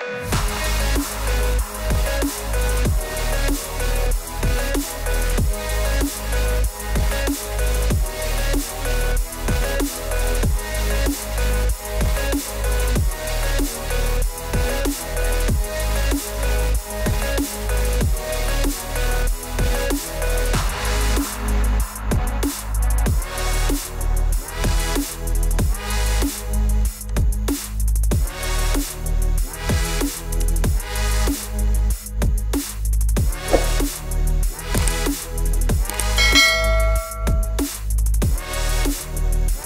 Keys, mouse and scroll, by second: 1.2 click, 3.9 click, 5.2 click, 6.5 click, 10.3 click, 13.2 click, 15.6 click, 16.9 click, 20.1 ctrl+r, 23.0 click, 27.1-34.9 drag, 36.7 click, 38.9 click.